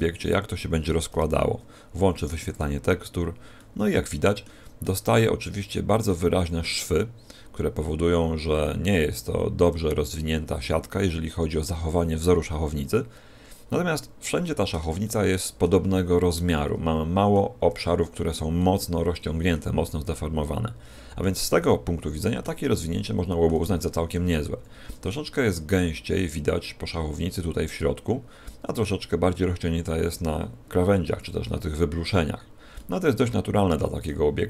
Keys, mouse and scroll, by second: 1.0 n, 1.7-2.4 scroll down 2, 2.4 click, 2.4 scroll down 1, 3.5 middle click, 4.7 middle click, 6.2-6.8 scroll up 5, 14.2 middle click, 14.9 shift+middle click, 16.4 middle click, 18.5 middle click, 20.0 middle click, 21.6 middle click, 23.7 shift+middle click, 24.3-24.7 scroll down 3, 24.8 middle click, 32.6 middle click.